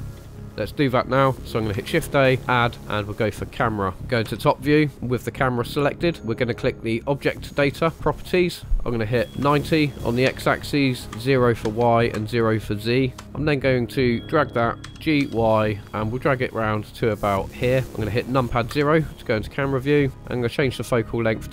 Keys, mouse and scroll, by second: 0.2 space, 0.3 click, 0.4 middle click, 1.8 shift+a, 3.9 scroll up 2, 4.2 KP_7, 7.1 click, 8.5-13.6 drag, 13.6 scroll down 1, 14.8 g, 15.2 y, 17.5 ctrl+click, 17.8 shift+middle click, 18.7 KP_0, 20.2 click, 21.3-21.5 drag.